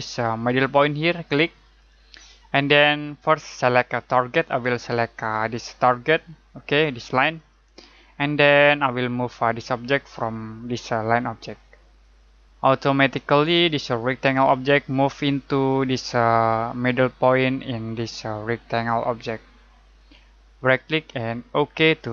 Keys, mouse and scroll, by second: 1.7 click, 7.3 click, 12.0 click, 20.5 right click, 21.7 click.